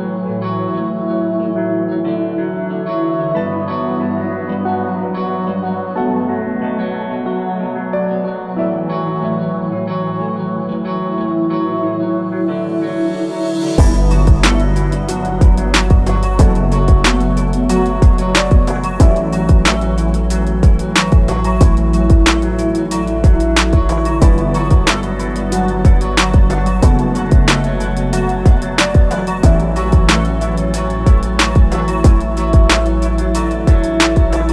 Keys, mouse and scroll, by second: 2.3 alt+click, 7.6 click, 12.9 alt+click, 16.8 click, 21.1 BackSpace, 22.6 click, 26.2 click, 30.7 Escape, 32.3 ctrl+q, 33.1-33.9 typing.